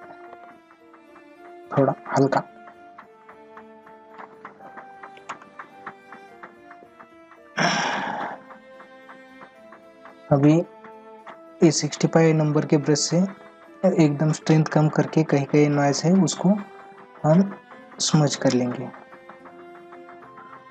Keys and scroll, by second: 0.3 ctrl+alt+z, 15.7 ctrl+-, 16.9 ].